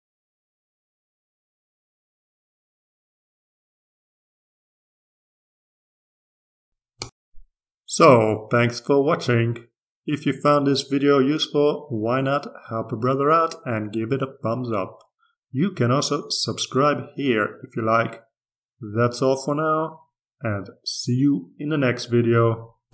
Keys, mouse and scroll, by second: 0.8-1.9 drag, 2.1 click, 3.0-5.5 drag, 6.0 ctrl+scroll down 2, 6.7 ctrl+r, 12.6-16.0 drag, 16.1-19.6 drag.